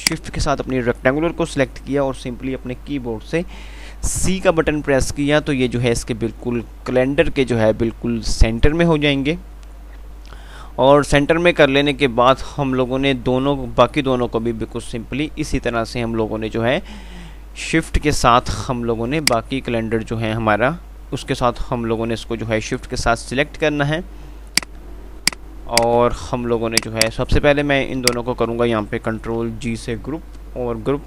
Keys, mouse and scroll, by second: 0.2 shift+click, 4.3 typing, 19.5 click, 24.8 click, 26.3 c, 27.0 click, 29.5 g.